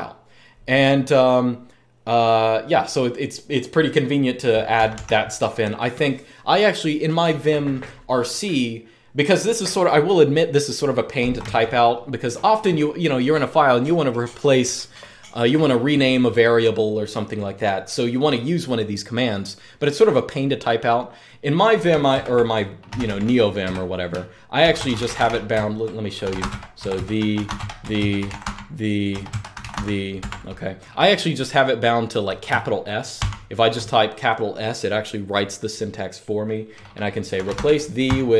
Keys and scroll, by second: 4.5 typing, 21.8 super+Return, 22.4-30.0 typing, 32.9 s, 36.8-38.3 typing.